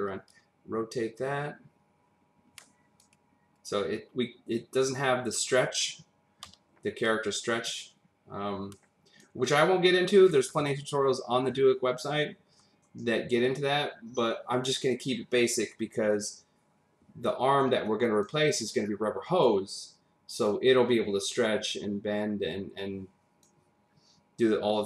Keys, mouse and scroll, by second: 0.3 click, 6.4 v, 7.0 click, 13.5 click, 15.7 click, 16.7 double click, 21.4 click.